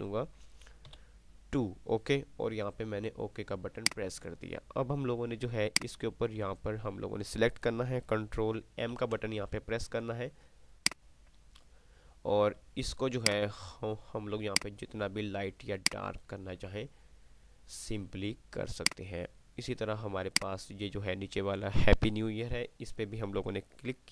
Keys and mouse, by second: 3.9 click, 8.7 click, 9.2 m, 11.2-12.1 drag.